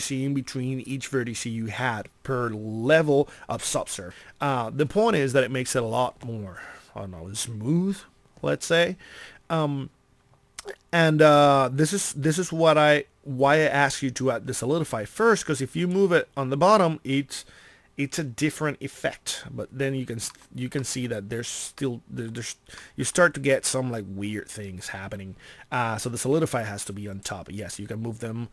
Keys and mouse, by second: 11.2-13.2 middle drag, 15.8 middle click.